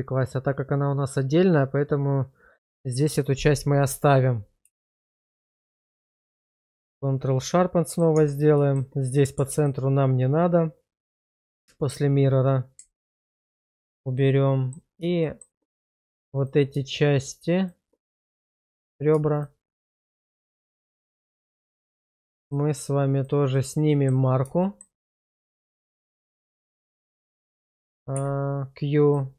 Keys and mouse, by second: 4.8 shift+middle click, 5.3 Tab, 5.8 click, 6.0 q, 7.5 middle click, 8.1 Tab, 8.7 shift+middle click, 11.1 middle click, 13.2 ctrl+x, 13.7 shift+middle click, 14.2 middle click, 15.2 shift+middle click, 17.6 shift+click, 18.1 middle click, 19.3 shift+click, 20.6 middle click, 21.3 shift+middle click, 23.6 middle click, 24.6 shift+middle click, 25.6 shift+click, 28.1 q.